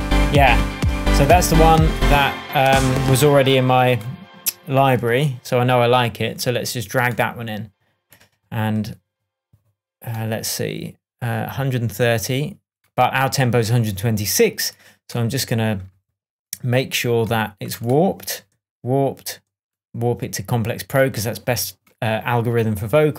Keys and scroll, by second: 2.6 space.